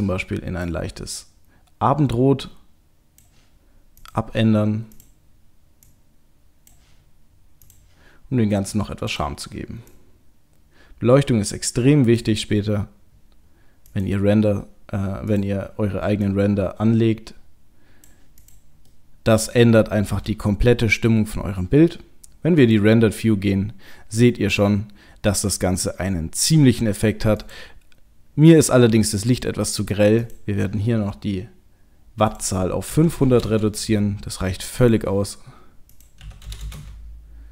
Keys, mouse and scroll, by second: 4.0 click, 4.1 click, 13.8 click, 15.3 click, 18.4 click, 18.9 middle click, 20.0 KP_0, 21.2-21.9 scroll up 1, 21.9-22.7 scroll up 2, 22.7 click, 27.4 click, 29.1 middle click, 30.2 click, 32.3 click, 33.3 KP_0, 34.8 click, 35.9 click, 36.6 KP_0.